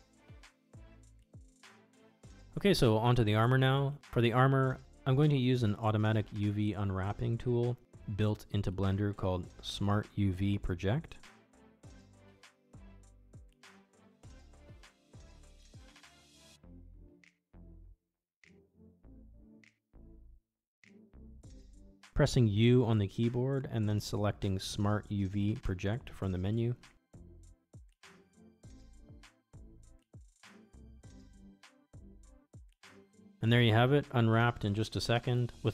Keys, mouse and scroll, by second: 0.6 shift+drag, 1.0 shift+click, 1.2 middle click, 1.6 middle click, 1.9 click, 2.5 shift+middle click, 2.6 middle click, 2.8 shift+middle click, 7.6-9.5 drag, 12.1 click, 14.3 shift+middle click, 17.7 middle drag, 18.9 click, 20.1 shift+middle drag, 21.4 middle click, 21.6 Tab, 23.2 a, 25.5 u.